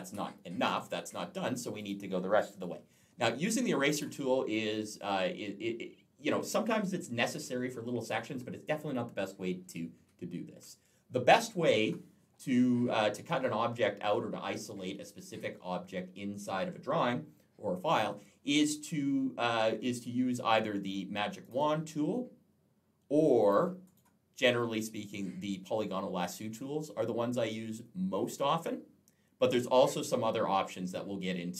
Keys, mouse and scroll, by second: 1.6 click, 3.8 click, 9.4 ctrl+z, 21.3 click, 23.3 click, 23.7 right click.